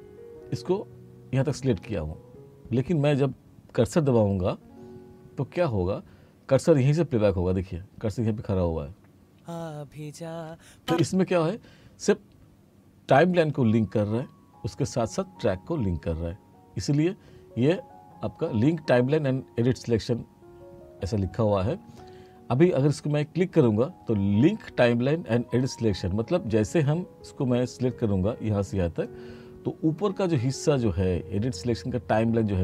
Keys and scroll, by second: 9.3 space, 10.9 space.